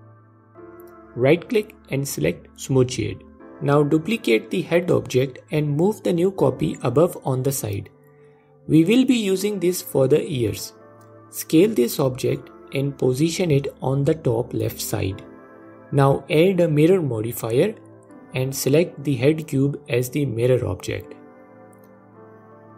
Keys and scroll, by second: 2.8 shift+d, 4.7 s, 10.8 s.